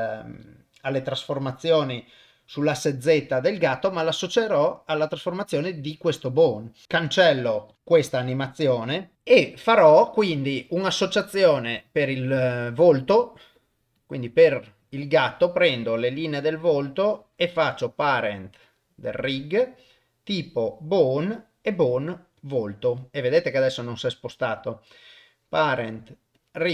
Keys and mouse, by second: 0.4 click, 0.9 middle click, 4.4 click, 6.0 click, 7.7 click, 7.7 click, 8.0 Delete, 11.2 click, 14.0 click, 14.5 click, 16.1 middle click, 16.8 click, 21.3-22.6 drag, 23.5 click, 24.6 click.